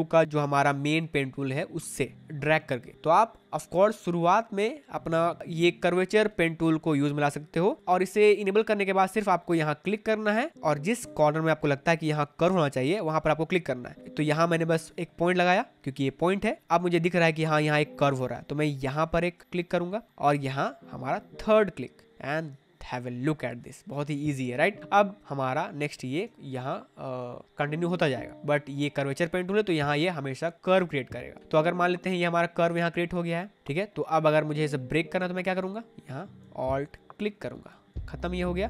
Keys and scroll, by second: 25.9 space.